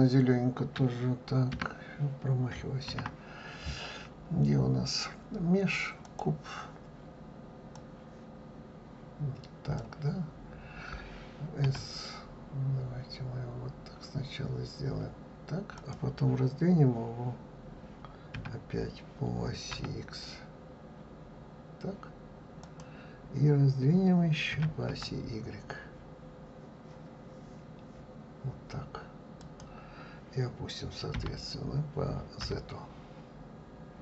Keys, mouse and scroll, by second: 3.2 shift+a, 8.0-11.0 drag, 31.4 g.